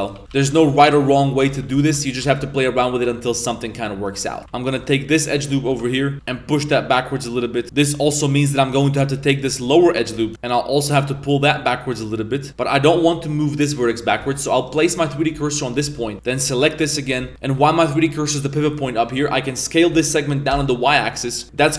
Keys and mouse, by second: 0.0-1.6 typing, 0.2 KP_Enter, 2.3 alt+right click, 2.7 g, 4.4 g, 4.4 z, 4.6 alt+right click, 4.8 middle click, 5.6 KP_3, 6.2 z, 6.2 g, 7.6 Tab, 7.6-8.8 middle drag, 7.6 1, 9.3 ctrl+right click, 9.7 middle click, 11.1 g, 14.2 z, 14.5 right click, 15.3 shift+s, 15.8 z, 16.1 z, 16.1 1, 16.2 ctrl+right click, 17.3 s, 17.6 middle click, 19.0 middle click, 19.9 s, 21.4 z.